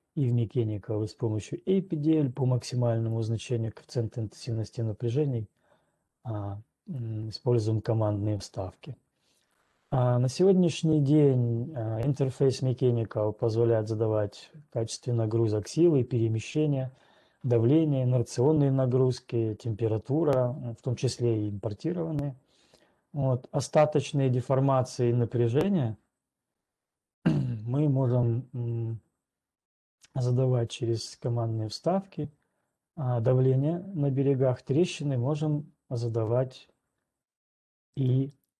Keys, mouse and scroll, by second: 6.9 right click, 38.0 right click.